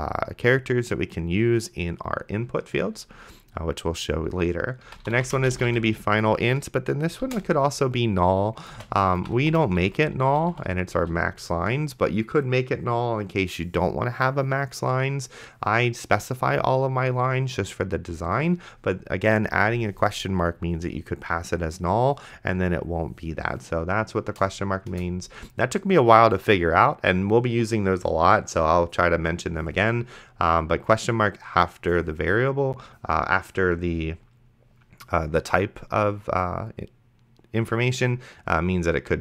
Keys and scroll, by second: 4.7-6.2 typing, 7.5 shift+/, 8.7-11.5 typing, 25.2 Return.